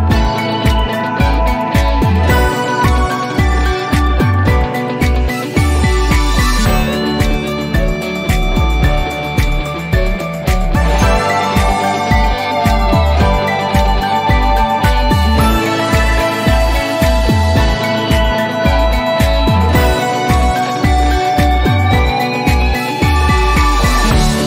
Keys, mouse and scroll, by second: 0.0-0.2 typing, 1.3 click, 3.1-3.6 drag, 4.7 typing, 5.8 Return, 8.3-9.0 drag, 9.5 t, 10.8 scroll down 1, 11.8-14.8 drag, 15.2-16.6 scroll up 1, 19.1 p, 20.7-23.4 alt+middle drag.